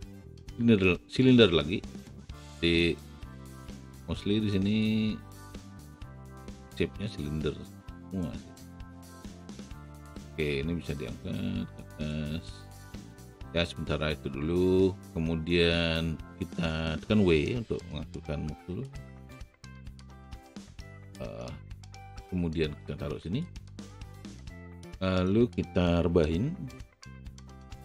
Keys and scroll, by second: 17.7 w, 26.7 e.